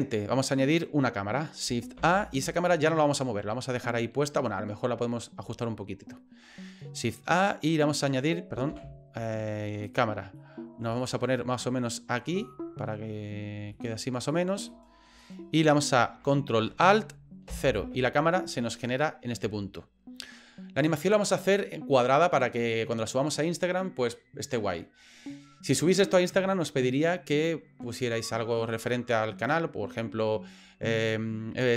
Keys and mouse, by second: 2.0 shift+a, 8.7 shift+a, 10.4 middle click, 11.0 middle click, 11.8 ctrl+middle click, 12.5 shift+middle click, 13.8 shift+middle click, 14.7 middle click, 15.3 shift+middle click, 17.5 ctrl+alt+KP_0.